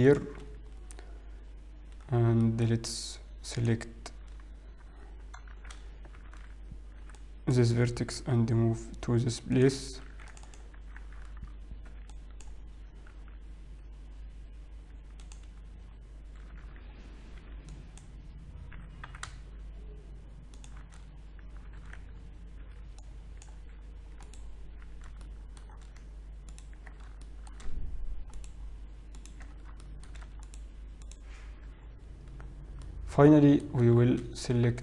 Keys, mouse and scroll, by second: 2.1-3.1 scroll down 3, 2.5 shift+middle click, 4.3 click, 4.3-5.2 scroll up 2, 5.6 shift+z, 6.4 alt+a, 7.1 b, 9.1 g, 11.2 ctrl+r, 12.5 alt+a, 12.5 b, 14.9 g, 16.0-17.0 scroll up 2, 17.0 alt+a, 17.5 b, 18.8 g, 21.9 alt+a, 22.7 b, 24.3 ctrl+right click, 25.3 shift+middle click, 27.0 ctrl+right click, 27.0-27.5 scroll down 1, 27.5 shift+middle click, 27.5-28.2 scroll down 1, 28.4 ctrl+right click, 29.3 ctrl+right click, 29.5-30.3 scroll down 3, 29.9 shift+middle click, 30.7 ctrl+right click, 31.6 ctrl+right click, 31.9-32.8 scroll up 3, 32.8-33.2 scroll down 1, 33.2 middle click, 34.1 shift+z.